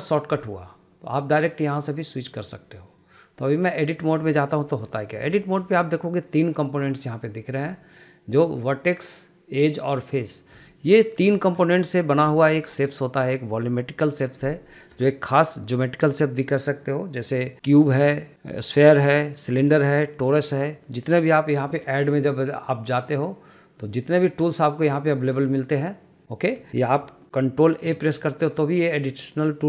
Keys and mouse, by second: 0.2-1.4 drag, 2.0-2.8 drag, 4.5 shift+middle click, 4.9 shift+middle click, 5.2 middle click, 5.6 shift+middle click, 5.8 shift+middle click, 10.9 shift+middle click, 11.2 middle click, 11.5 shift+middle click, 11.8 shift+middle click, 12.5 shift+middle click, 24.1-26.7 drag, 26.8 shift+middle click, 28.1 shift+a.